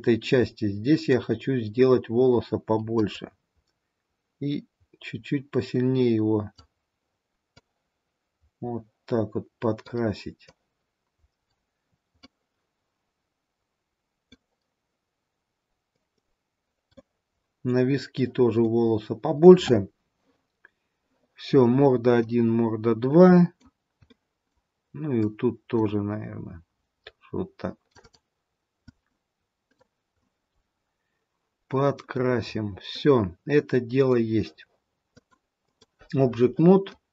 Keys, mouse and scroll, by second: 0.1-1.2 scroll down 1, 1.2 click, 3.2 click, 7.7 click, 10.5 click, 12.3 middle click, 16.0 click, 17.0 middle click, 18.6 middle click, 22.2 middle click, 24.1 middle click, 25.3 click, 28.3 click, 30.2 middle click, 32.9 middle click, 35.1 click, 36.9 middle click.